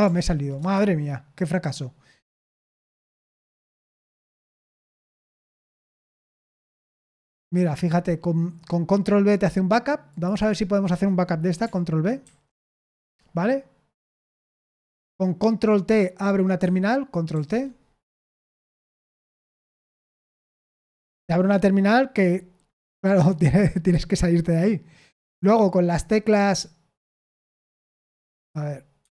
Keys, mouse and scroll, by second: 0.1 ctrl+p, 0.6 Return, 12.2 ctrl+b, 14.3 Escape, 17.3 ctrl+t, 18.6-19.9 typing, 28.4 k, 29.0 Escape.